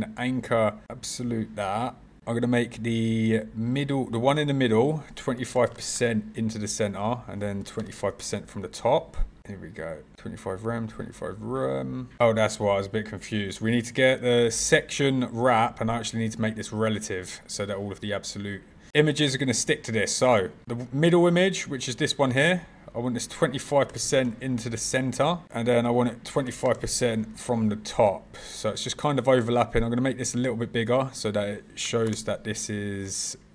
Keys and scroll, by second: 5.8 shift+5, 8.0 shift+5, 24.0 shift+5, 25.4 shift+5, 26.7 shift+5.